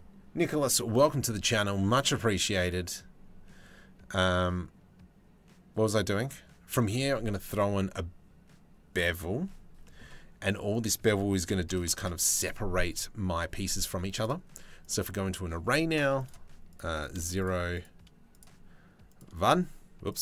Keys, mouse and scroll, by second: 9.4 click, 10.4-11.6 drag, 13.8 click, 15.8 click, 16.6 click, 17.0 click, 18.7 click, 19.7 click.